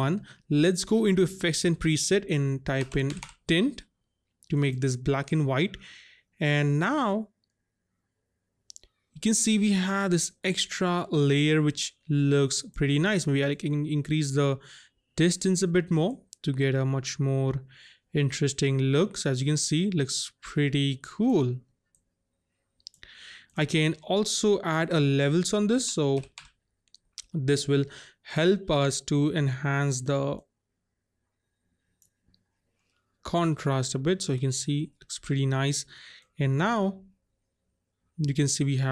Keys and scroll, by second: 2.9 typing, 25.7-26.3 typing.